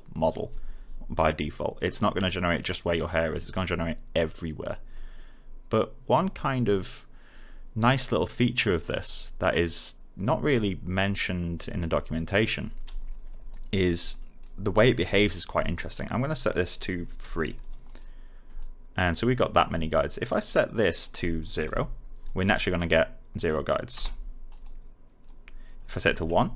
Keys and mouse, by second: 6.5 click, 13.4 alt+click, 14.0 alt+middle click, 14.6 alt+click, 15.1 alt+middle click, 16.1 click, 17.2 3, 17.8 click, 21.6 0, 22.2 click, 23.9 Return, 24.4 click, 26.1 1.